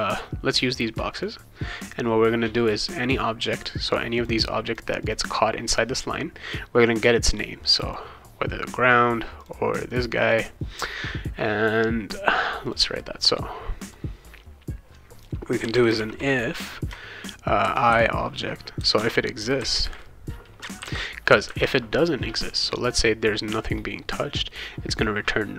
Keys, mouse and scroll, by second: 0.5 click, 1.1 click, 1.9 click, 4.1 click, 4.6 click, 5.0 click, 7.8 click, 9.4 click, 9.9 click, 10.2 click, 12.6 click, 13.9 click, 15.4-16.4 typing, 17.6 shift+i, 17.9 o, 18.9 Return, 20.8 shift+[, 20.9 shift+].